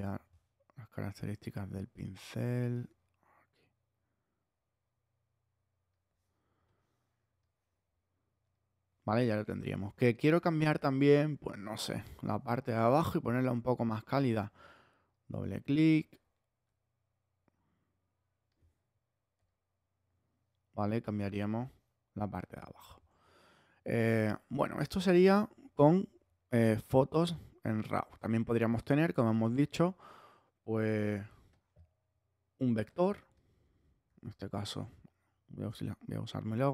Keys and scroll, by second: 27.9 super+Tab, 34.0 super+c, 34.8 super+Tab.